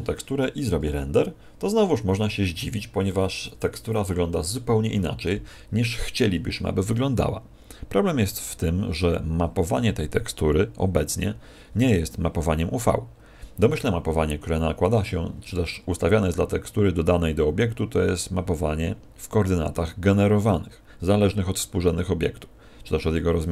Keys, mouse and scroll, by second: 13.1 Escape, 16.4-18.3 scroll down 1, 18.6-23.4 scroll down 5.